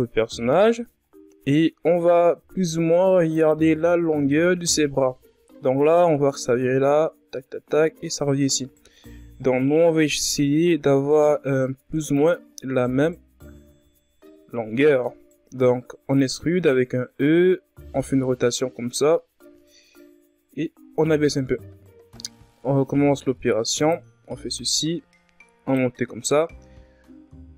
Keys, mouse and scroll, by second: 0.1-0.5 ctrl+scroll up 1, 2.4-3.7 drag, 3.7-4.1 scroll up 3, 4.2 z, 7.7 z, 8.1-8.6 scroll down 2, 8.6-9.3 ctrl+scroll up 1, 9.3 e, 11.6-12.0 ctrl+scroll down 2, 12.0-12.9 scroll up 1, 12.9 r, 16.4-19.6 drag, 19.6-20.6 scroll down 2, 20.6-21.3 scroll up 1, 21.3 e, 23.7-26.0 drag, 26.0 s.